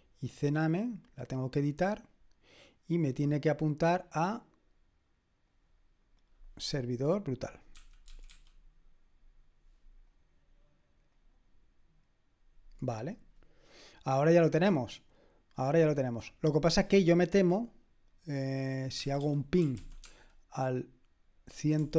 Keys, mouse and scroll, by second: 1.5 click, 5.5 click, 7.5-8.8 typing, 10.1 click, 11.2 click, 16.2 click, 18.7-20.3 typing, 21.8-21.9 typing.